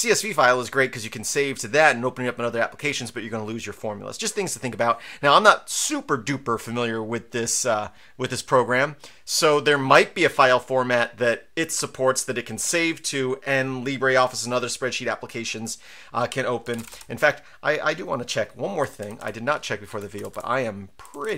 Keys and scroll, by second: 16.5-17.3 typing, 18.6-21.3 typing, 19.9 Tab.